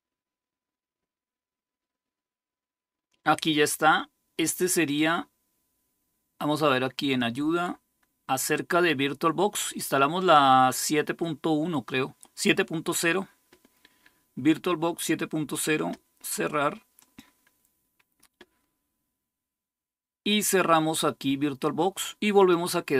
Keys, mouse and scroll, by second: 6.9 click, 10.0 click, 16.7-22.9 drag.